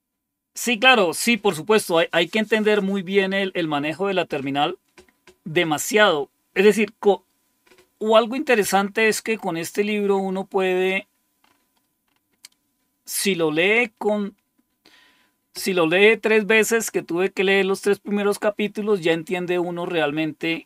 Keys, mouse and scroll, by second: 9.2-12.8 scroll up 6.